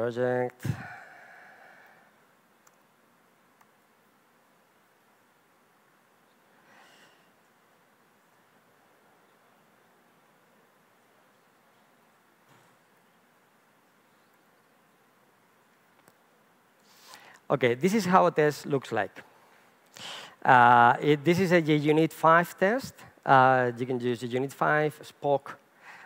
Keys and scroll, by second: 12.0 alt+F12, 14.3 super+1.